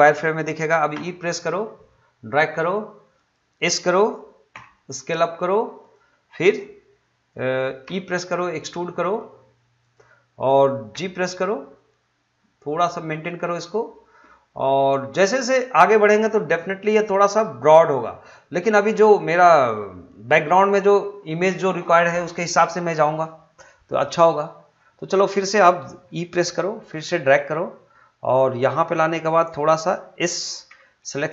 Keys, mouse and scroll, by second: 0.9 e, 3.1 click, 4.5 s, 5.8 click, 7.8 e, 9.8 click, 10.9 g, 13.5 click, 26.4 e, 28.8 click, 30.7 w.